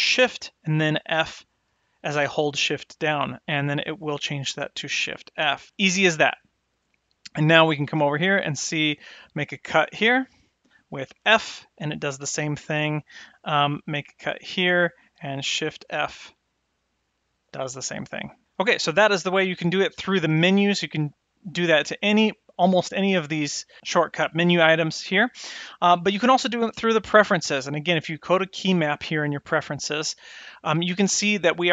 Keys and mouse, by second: 8.7 click, 10.0 click, 11.1 f, 14.4 click, 16.5 shift+f, 21.5-25.4 drag.